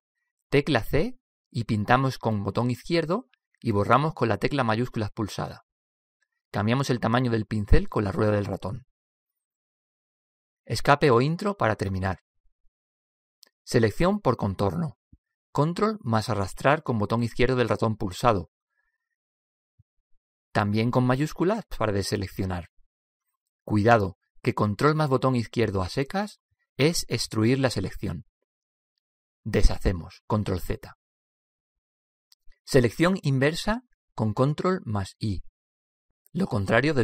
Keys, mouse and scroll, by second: 2.7 c, 16.2-18.2 drag, 21.9-23.3 drag, 26.6-28.5 drag, 30.7 ctrl+z.